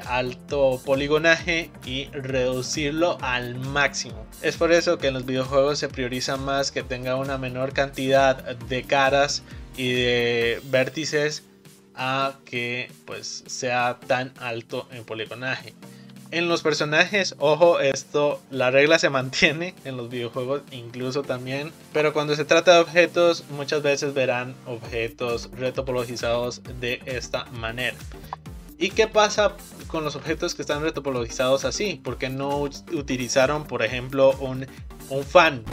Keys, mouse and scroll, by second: 12.7-15.6 middle drag, 21.8-23.9 middle drag, 29.3 click, 29.9-31.6 shift+middle drag, 31.6 Tab, 32.3-35.3 shift+middle drag.